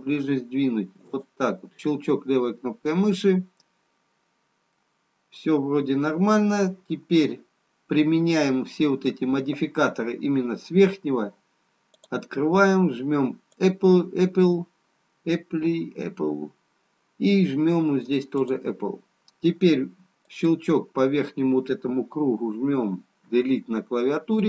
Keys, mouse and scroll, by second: 3.6 middle click, 3.6-4.7 scroll up 1, 5.2 middle click, 5.2-5.8 scroll down 3, 12.0 click, 15.8 click, 18.4 click, 23.7 Delete.